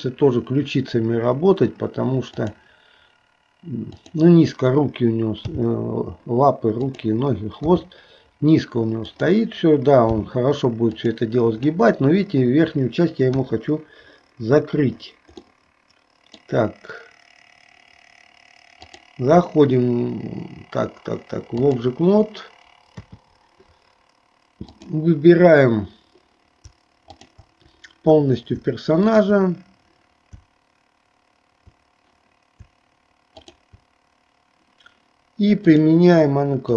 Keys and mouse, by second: 3.9 click, 15.6-17.1 middle drag, 19.0-23.0 drag, 24.7 click, 27.1 shift+click, 29.0 shift+click, 33.4 shift+click, 35.7 click.